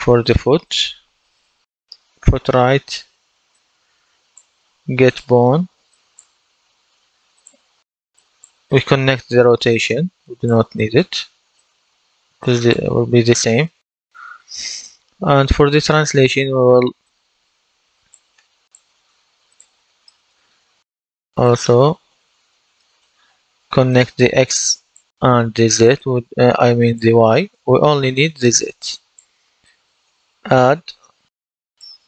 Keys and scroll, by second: 0.0-1.3 typing, 30.6 shift+=.